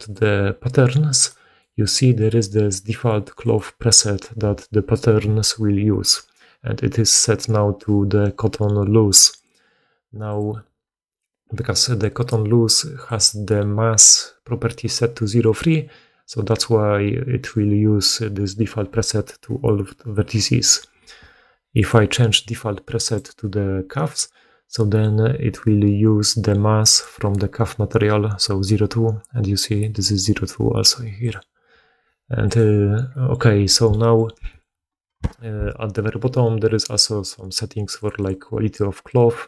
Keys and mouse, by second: 13.0-21.8 middle drag, 21.8-26.9 drag, 26.9-31.1 middle drag, 31.1-39.4 drag.